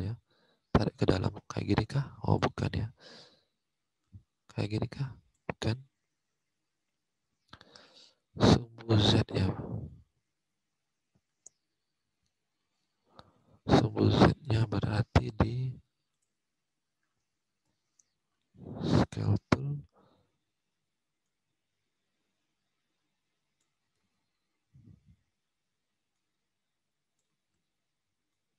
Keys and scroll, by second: 2.5 ctrl+z, 5.7 alt+Tab, 13.9 alt+Tab, 23.9 ctrl+z, 27.2 ctrl+z.